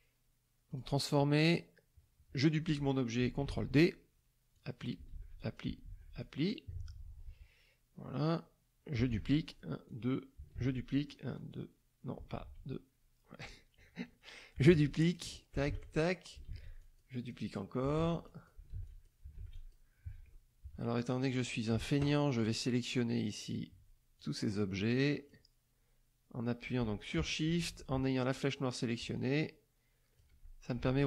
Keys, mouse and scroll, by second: 0.7 click, 3.4 ctrl+d, 4.5 click, 5.1 ctrl+d, 5.4 ctrl+click, 5.8 ctrl+d, 6.2 ctrl+click, 9.1 ctrl+d, 9.4 ctrl+click, 9.8 ctrl+click, 10.5 ctrl+d, 10.9 ctrl+click, 11.3 ctrl+click, 12.4 ctrl+z, 14.7 ctrl+d, 15.0 ctrl+click, 15.6 ctrl+d, 15.8 ctrl+click, 16.4 ctrl+d, 16.8 ctrl+click, 17.3 ctrl+click, 17.9 ctrl+d, 18.2 ctrl+click, 18.7 ctrl+d, 18.9 ctrl+click, 19.5 ctrl+click, 20.6 KP_Subtract, 21.4 click, 22.4-23.7 drag, 24.1-25.5 shift+drag, 29.2-30.3 shift+drag.